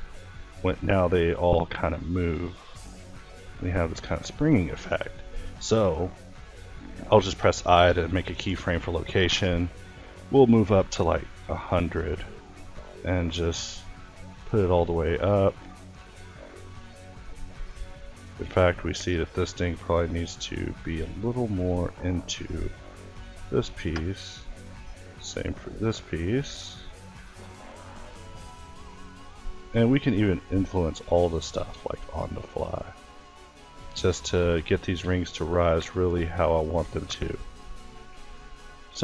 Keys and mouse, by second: 7.2 i, 12.0 g, 13.2 g, 14.6 g, 15.8 g, 18.3-19.7 drag, 20.2-21.5 drag, 21.5-23.8 middle drag, 23.8-24.9 drag, 26.1-28.2 drag, 30.0-31.1 drag, 32.9-34.2 drag, 36.1-37.1 middle drag, 37.1-39.0 drag.